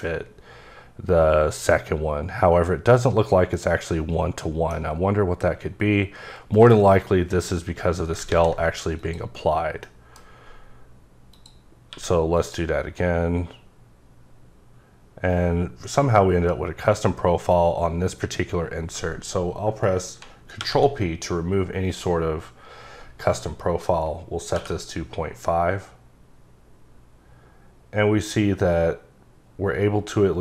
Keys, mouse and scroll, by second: 3.6 middle click, 6.5 right click, 7.3 click, 8.3 ctrl+a, 9.0 click, 10.1 middle click, 11.3 click, 11.9 q, 12.3 click, 20.2 ctrl+Num_Lock, 20.2 click, 20.6 p, 24.6 p.